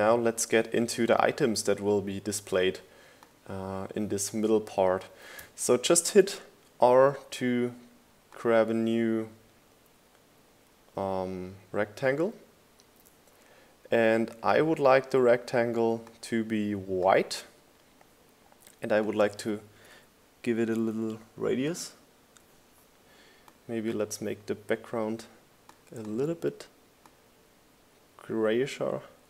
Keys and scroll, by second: 0.5 super+s, 7.5 r, 8.5 r.